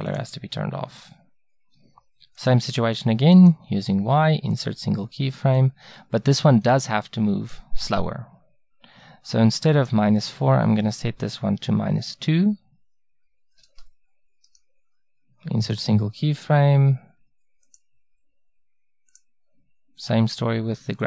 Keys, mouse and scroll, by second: 14.5-16.4 right drag, 18.6-20.8 right drag.